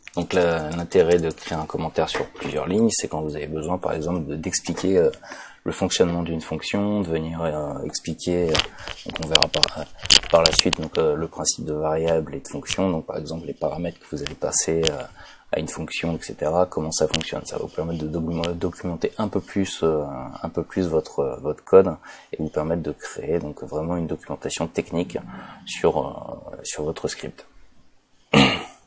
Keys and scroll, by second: 3.3 BackSpace.